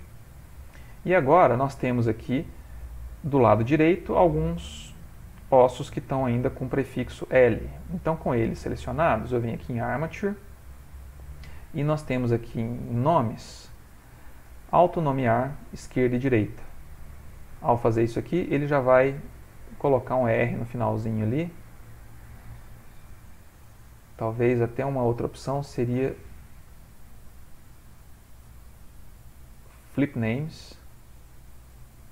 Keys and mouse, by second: 0.2 ctrl+middle click, 0.3 ctrl+middle click, 0.9 middle click, 1.8 shift+middle click, 1.9 shift+middle click, 5.1 middle click, 9.3 click, 20.1 click, 20.6 click, 22.0 click, 22.3 click, 23.0 ctrl+z, 23.6 ctrl+z, 26.3 click, 31.6 middle click.